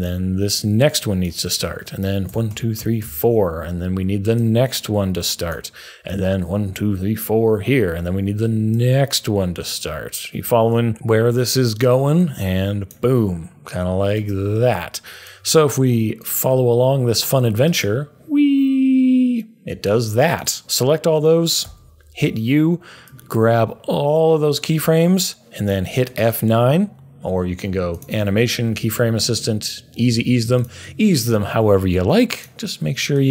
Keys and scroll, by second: 2.2 Page_Down, 2.5 Page_Down, 2.7 Page_Down, 3.0 Page_Down, 10.9 Page_Down, 20.6 super+a, 21.6 u, 26.0 F9.